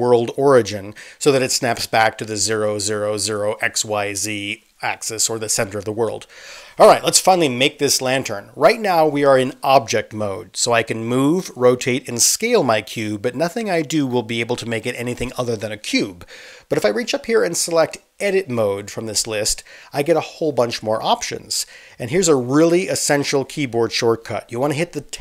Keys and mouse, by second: 5.6 space.